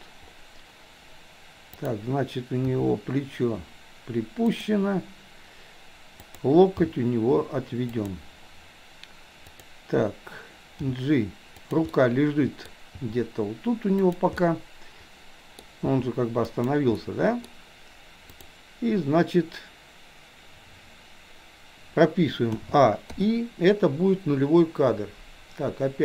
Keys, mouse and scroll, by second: 1.8 click, 2.7 r, 6.2 click, 6.8 g, 9.4 click, 10.8 g, 11.9 middle click, 12.7-13.1 scroll down 1, 13.1 g, 14.4-15.1 scroll up 1, 15.1 middle click, 15.8 g, 17.1-17.4 middle drag, 18.3 click, 22.6 a, 23.2 i.